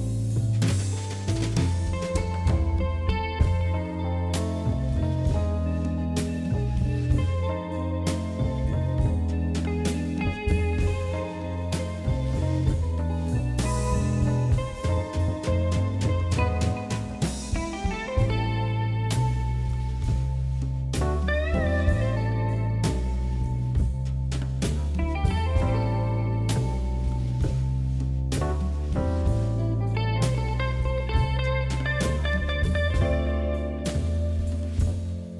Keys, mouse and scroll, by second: 0.8 1, 1.0 click, 1.6 g, 2.2 click, 2.7 click, 3.5 e, 4.2 ctrl+z, 5.0 click, 6.4 e, 7.4 g, 8.9 ctrl+r, 9.9 click, 10.7 e, 11.4 g, 13.7 ctrl+r, 14.8 ctrl+b, 15.9 click, 16.7 g, 18.0 click, 19.0 e, 20.3 g, 20.9 ctrl+z, 21.1 ctrl+z, 21.4 click, 21.9 g, 23.2 ctrl+r, 24.1 s, 25.6 s, 26.9 scroll down 3, 27.2-27.7 scroll up 2, 28.1 middle click, 28.9 shift+z, 29.4 click, 29.9 4, 30.1 3, 30.2 click, 30.6 KP_1, 31.2 shift+middle click, 32.0 shift+z, 32.1 scroll up 3, 32.7 e, 33.7 1, 33.8 click, 34.4 g, 35.0 click.